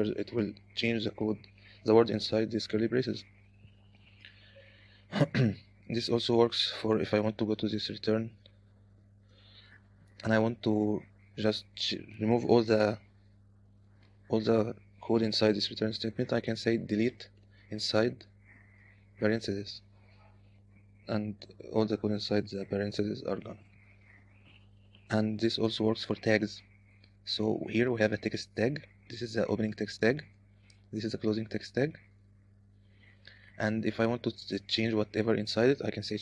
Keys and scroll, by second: 0.1-0.9 typing, 4.7-10.9 typing, 13.1 k, 13.2 k, 14.2 shift+4, 17.0 j, 17.6 d, 17.8 i, 19.2 (, 23.7 u, 25.4 j, 25.8 j, 27.5-30.9 typing, 34.1 k.